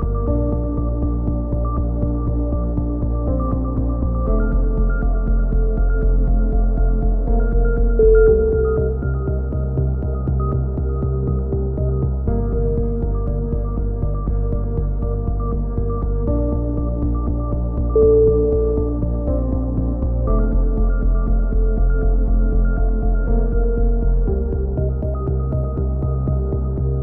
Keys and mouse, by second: 0.1 z, 0.4-0.8 drag, 1.0-1.5 drag, 2.3-6.2 drag, 5.0 c, 6.4 a, 6.8 Tab, 7.7 a, 8.1 Tab, 8.6 alt+h, 8.7 a, 8.9-9.5 drag, 10.0 Tab, 15.6 click, 16.6 KP_7, 17.3 Tab, 17.5-19.2 middle drag, 17.6 z, 19.2-19.6 drag, 19.8 a, 21.3 z, 22.6 ctrl+r, 25.7-27.0 drag, 26.3 a.